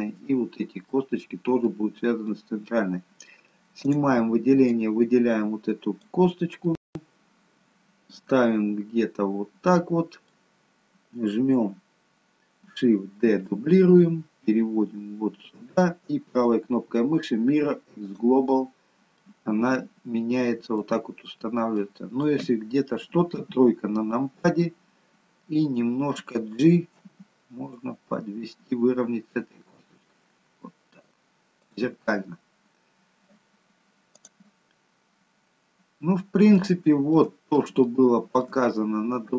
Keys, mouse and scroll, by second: 1.0 middle click, 1.9 scroll down 2, 2.4 middle click, 3.9 click, 4.8 click, 6.8 middle click, 13.1 shift+d, 16.1 right click, 19.1 middle click, 21.1-21.7 scroll up 1, 21.7 middle click, 23.4 KP_3, 26.9 g, 32.8-34.6 scroll down 1, 34.6-35.1 scroll down 1, 36.9 shift+middle click, 37.7 shift+scroll up 1, 37.9 shift+middle click, 38.7 middle click.